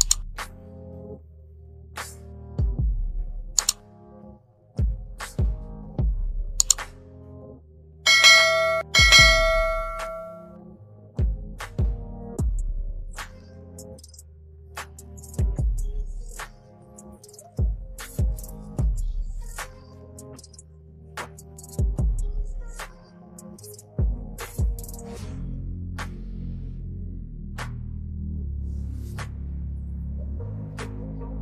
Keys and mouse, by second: 0.6 click, 3.8 click, 8.5 click, 9.2 Left, 10.5 click, 11.3 KP_9, 11.5 KP_Enter, 12.5 Right, 12.7 Right, 13.4 Right, 14.2 Left, 14.5 Left, 15.4 click, 16.0 Left, 16.2 Left, 16.6 Left, 16.9 Left, 19.1 click, 20.2 Left, 21.1 Right, 22.6 ctrl+KP_0.